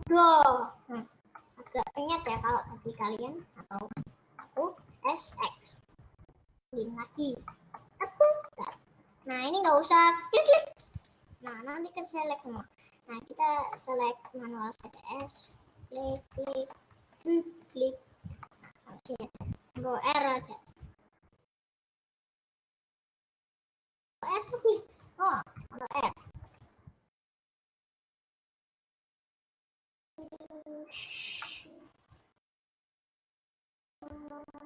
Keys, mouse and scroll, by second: 2.4 KP_Add, 2.6 KP_Add, 2.8 KP_Add, 3.2 KP_Add, 4.5 middle click, 4.7 s, 7.6-9.4 middle drag, 9.4 click, 9.7 middle click, 11.0 click, 11.5-13.2 middle drag, 13.2 click, 13.4 scroll up 3, 13.8-15.0 middle drag, 15.0 click, 16.2 shift+click, 16.7 middle click, 17.2 shift+click, 17.8 shift+click, 18.5-20.2 middle drag, 20.2 ctrl+r, 22.9-26.1 drag, 26.1 ctrl+r, 29.3 click, 31.4 scroll up 1, 31.5-33.2 middle drag, 33.2 shift+click, 33.8 shift+click.